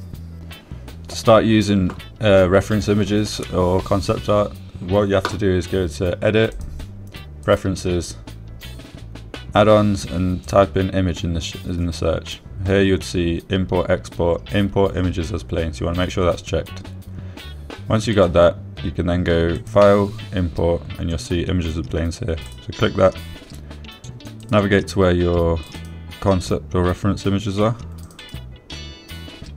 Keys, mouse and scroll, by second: 8.0-9.0 drag, 20.9-24.0 drag.